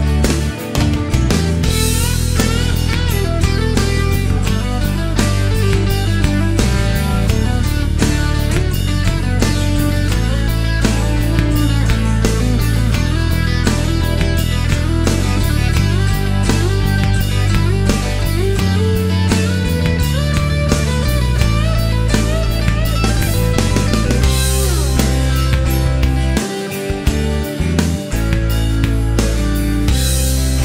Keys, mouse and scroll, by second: 1.8 e, 4.7 click, 5.4 click, 6.5 shift+o, 7.0 shift+middle click, 8.5 click, 9.5 click, 10.2 shift+o, 11.9 click, 12.5 click, 13.5 click, 14.4 click, 15.0 shift+o, 15.5 shift+middle click, 15.7 shift+scroll up 1, 16.9 click, 17.7 click, 18.2 shift+o, 19.7 click, 20.6 click, 21.1 shift+o, 21.9 shift+scroll down 1, 22.1-23.1 shift+middle drag, 23.1 scroll down 1, 23.3-24.7 middle drag, 25.2-26.9 middle drag, 28.8 click.